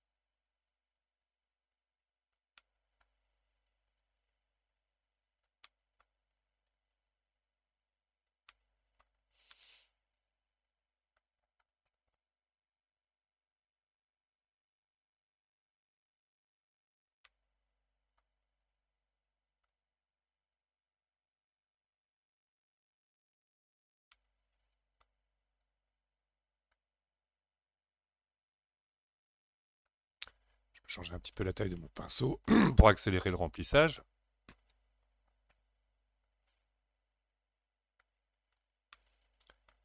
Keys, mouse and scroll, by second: 0.7-2.6 drag, 2.6-4.0 middle drag, 4.0-5.7 drag, 5.7-6.7 middle drag, 6.7-8.5 drag, 8.5 middle click, 9.2-9.5 scroll down 4, 9.5-12.5 middle drag, 12.5-13.7 scroll up 3, 13.7-16.8 drag, 17.3-18.6 middle drag, 18.6-23.6 drag, 24.1-25.6 middle drag, 25.6-28.7 drag, 31.7 click, 32.5 middle click, 33.3-36.3 drag, 38.9-39.8 middle drag.